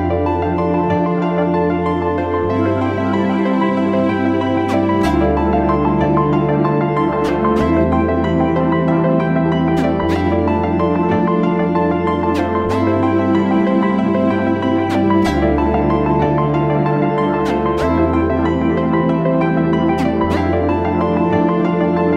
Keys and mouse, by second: 3.0 shift+a, 14.0 shift+a.